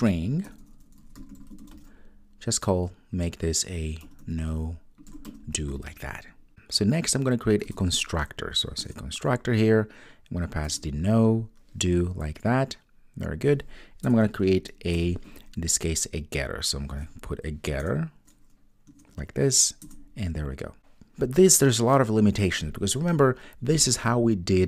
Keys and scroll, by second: 7.7 super+n, 14.9 super+n.